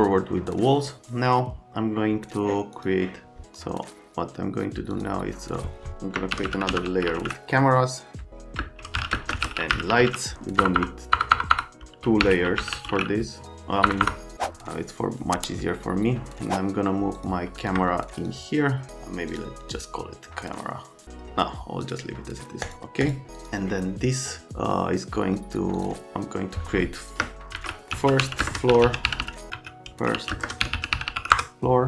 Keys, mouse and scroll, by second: 2.7 click, 3.4 click, 4.9 click, 6.1-14.0 typing, 17.2 click, 17.6 click, 18.2 click, 19.3 click, 21.8 click, 22.7 click, 23.0 click, 23.4 click, 25.8 click, 27.3-31.7 typing.